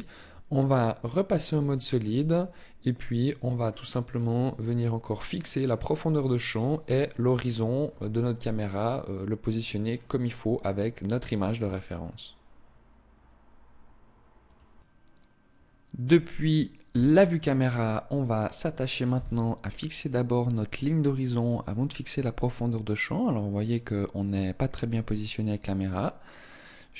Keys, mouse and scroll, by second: 1.7 middle click, 4.3-5.9 scroll up 2, 16.7 KP_0, 18.9 n, 21.1 click, 25.9 right click.